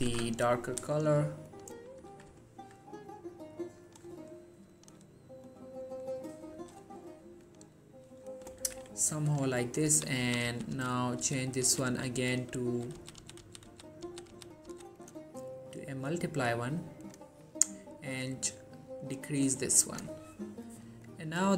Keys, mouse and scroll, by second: 0.2 ctrl+z, 0.8 click, 1.6 shift+click, 2.5-4.0 alt+scroll down 2, 4.0 click, 4.8 shift+click, 5.6-6.7 scroll up 2, 6.7 click, 9.4 click, 10.0 Down, 15.1 click, 15.9-16.5 scroll down 1, 16.5 scroll up 1, 17.2-20.2 drag.